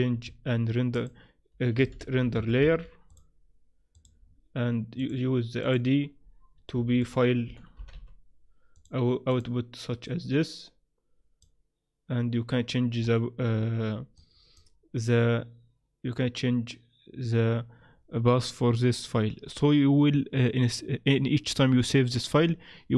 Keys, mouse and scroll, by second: 0.2 shift+a, 4.3-5.0 scroll down 3, 5.0 click, 6.7 shift+a, 10.0 click, 13.0-14.2 scroll up 5, 14.2 click.